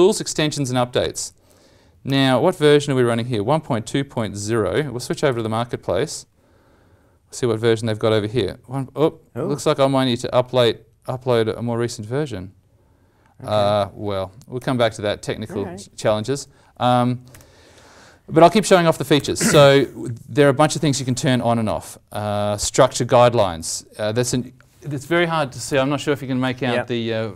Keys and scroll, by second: 5.3 alt+Tab, 14.5 alt+Tab, 14.7 alt+Tab.